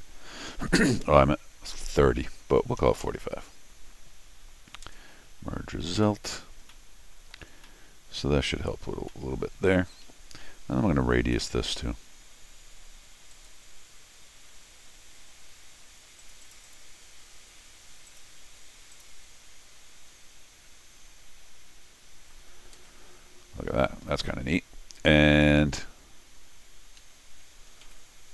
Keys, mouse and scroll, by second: 5.3-6.4 middle drag, 6.7 middle click, 7.6 scroll down 1, 7.6 middle click, 9.1 middle click, 9.6 scroll up 1, 9.7 middle click, 10.0 Escape, 11.3 u, 13.3 click, 16.2 click, 16.4 click, 16.6 click, 18.1 click, 18.9 click, 24.3 middle click, 26.5 scroll up 2, 27.0 Escape, 27.8 u.